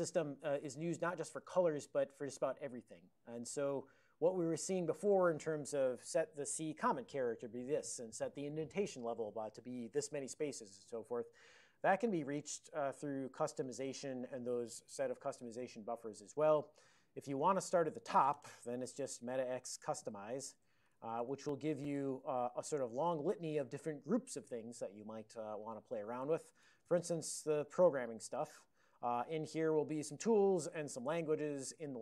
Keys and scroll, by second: 20.2 alt+x, 20.2-21.6 typing, 21.8 Return, 22.8 ctrl+a, 23.1 ctrl+p, 23.3 ctrl+l, 26.7 ctrl+n, 29.3 ctrl+a, 29.5 ctrl+n, 30.2 ctrl+p, 31.1 Return.